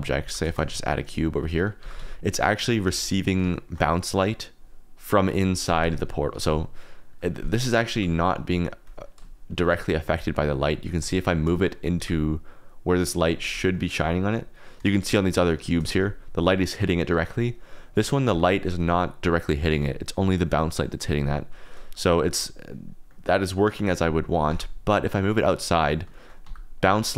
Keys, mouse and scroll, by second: 0.0-2.8 typing, 0.8-1.1 drag, 1.6 click, 2.2 click, 3.2 click, 3.5 shift+drag, 7.9 g, 8.8 click, 9.5 shift+click, 9.8 middle click, 10.3 middle click, 10.8 shift+middle click, 11.9 g, 12.9 click, 13.7 shift+middle click, 14.3 click, 14.9 shift+drag, 15.6 shift+drag, 15.9 g, 17.1 Escape, 17.4 click, 17.8 click, 18.2 g, 19.7 Escape, 22.1 click, 23.0 click, 24.4 g, 25.4 click, 26.1 shift+click, 26.4 g, 26.7 click.